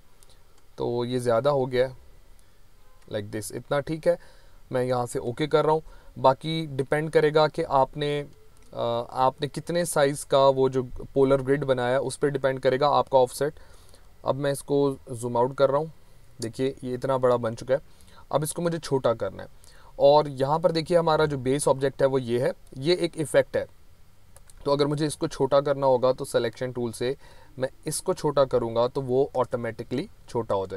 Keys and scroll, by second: 13.9 ctrl+-, 15.2 ctrl+-.